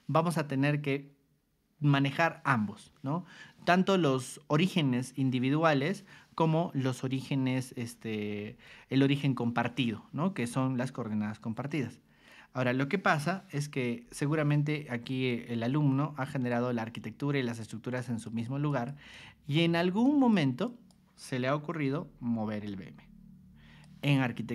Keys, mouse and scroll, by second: 14.0 o, 15.3-16.5 ctrl+drag, 17.6 click, 18.2 click, 18.7 click, 19.1 click, 20.0 click, 20.6 click, 21.8 g, 22.6-23.8 drag.